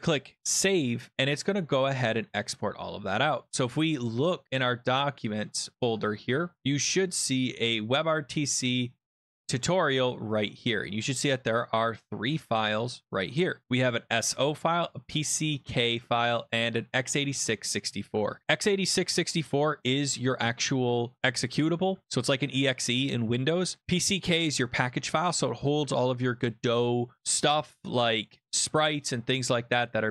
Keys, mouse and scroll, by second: 0.5 click, 2.6 click, 3.9 click, 5.3 click, 5.9 click, 7.8 scroll down 2, 9.0 scroll, 9.4 click, 9.6 click, 10.8 click, 12.8 click, 13.3 click, 13.9 click, 14.7 click, 16.2 click, 23.8 click.